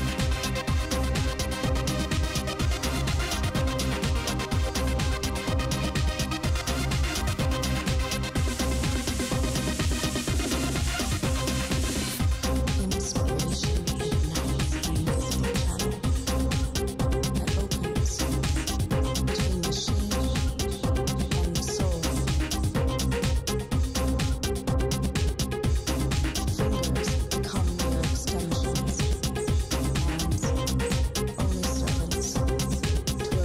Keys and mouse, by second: 0.0 alt+f, 0.2 z, 1.7 s, 3.5-4.6 middle drag, 4.4 s, 6.8 z, 8.3 KP_7, 9.4 z, 10.0-11.4 right drag, 11.0 s, 12.4 s, 17.3 shift+s, 20.1 click, 20.4 Tab, 22.0 click, 22.4 click, 22.6 middle click, 22.9 click, 23.3 click, 23.8 ctrl+r, 26.4 ctrl+r, 30.2 click, 30.6 ctrl+Tab, 32.5 right click, 33.2 right click.